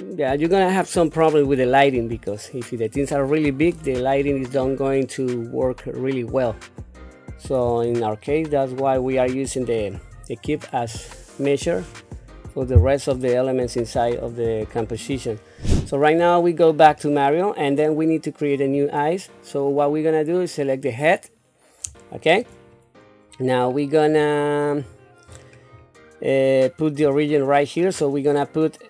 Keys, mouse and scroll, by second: 8.3 shift+middle click, 9.5 scroll up 2, 13.1 shift+middle click, 14.2-15.4 scroll up 2, 16.1-16.8 scroll up 2, 17.0 shift+middle click, 18.6 click, 22.0 shift+middle click, 22.7 scroll up 3, 23.3-24.9 scroll down 8, 25.2-26.3 scroll up 6, 26.4 scroll down 1.